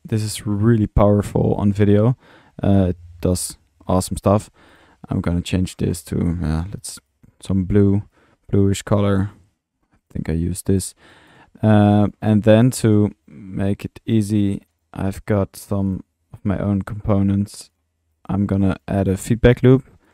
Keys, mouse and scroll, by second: 0.2 click, 0.9 click, 1.1-2.5 middle drag, 4.7 click, 5.4-5.7 drag, 6.5-7.1 drag, 7.3-9.2 drag, 9.3-10.3 drag, 10.7 middle click, 11.1 click, 12.6 click, 14.8 click, 15.9-16.3 drag, 17.1-18.0 drag, 18.1 drag, 19.0 1.